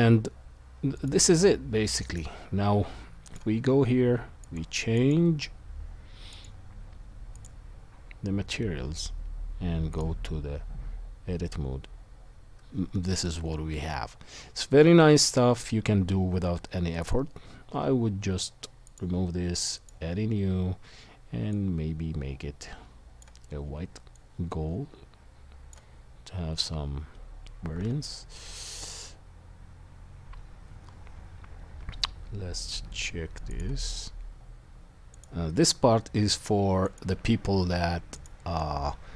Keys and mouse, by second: 1.1 right click, 2.0 middle click, 2.1-3.2 right drag, 3.2 middle click, 3.3-4.4 right drag, 4.4-8.1 middle drag, 10.0-11.7 right drag, 11.7-14.6 middle drag, 14.6 shift+right click, 14.9 shift+middle click, 15.2 shift+middle click, 15.3-39.1 shift+right drag, 15.6-39.1 middle drag, 18.8-33.6 drag, 35.2-37.0 drag, 38.2-39.1 drag.